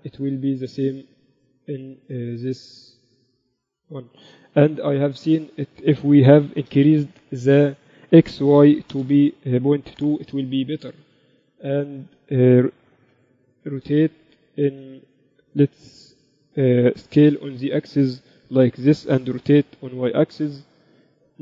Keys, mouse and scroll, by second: 0.6-2.5 middle drag, 1.8-4.7 drag, 4.7-6.1 middle drag, 5.2 n, 6.1-8.0 drag, 8.4-10.2 drag, 10.7 n, 12.2 z, 13.6 r, 16.3 s, 19.5 r.